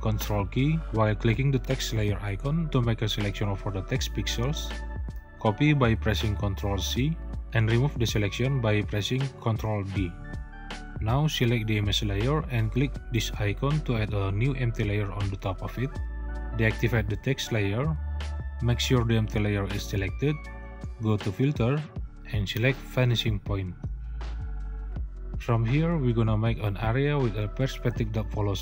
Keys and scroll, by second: 5.6 ctrl+c, 8.6 ctrl+d.